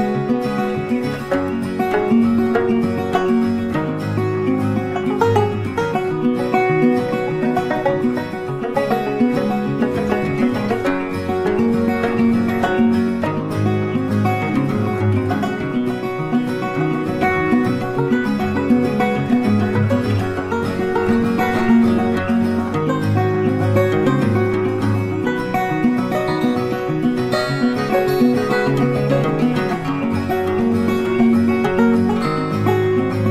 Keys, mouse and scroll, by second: 1.3 double click, 1.8 alt+click, 4.5 space, 5.1 alt+click, 8.3 ctrl+z, 8.4 ctrl+click, 8.8 ctrl+z, 9.1 ctrl+space, 9.2 ctrl+click, 9.4 ctrl+space, 10.5 shift+click, 14.4 space, 15.0 alt+click, 18.9 ctrl+z, 20.9 ctrl+space, 22.7-23.0 scroll up 1, 23.2 ctrl+click, 23.9 ctrl+shift+click, 25.9 double click, 26.1 ctrl+space, 26.1 ctrl+click, 26.3 ctrl+space, 26.8 ctrl+click, 28.4 space, 30.6 ctrl+space, 30.7 ctrl+click, 30.9 ctrl+click, 32.1 space.